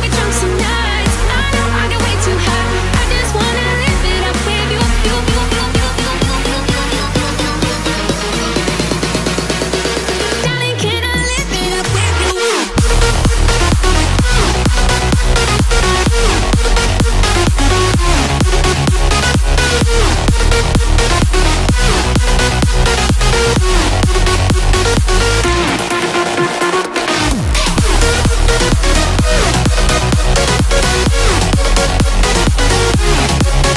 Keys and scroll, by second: 15.5-16.4 typing, 20.5 ], 30.5 [, 30.6 [.